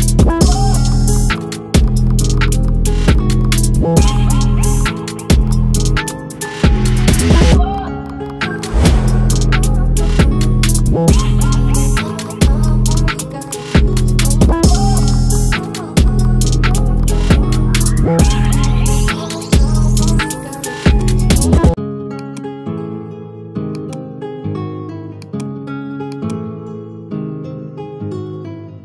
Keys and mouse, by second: 5.0 click, 6.7 click.